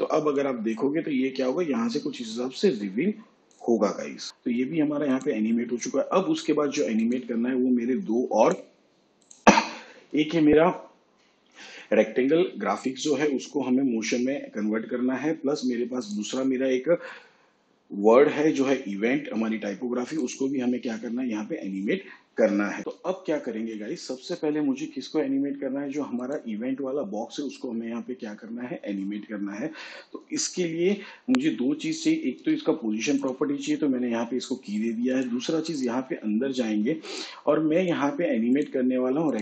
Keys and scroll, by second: 32.3 p.